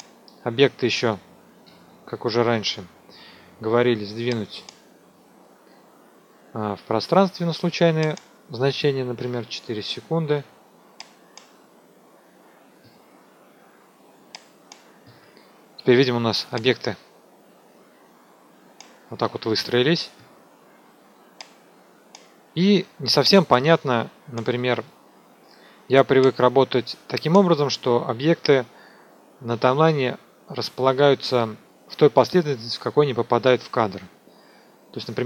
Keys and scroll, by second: 1.6 ctrl+a, 9.1 KP_4.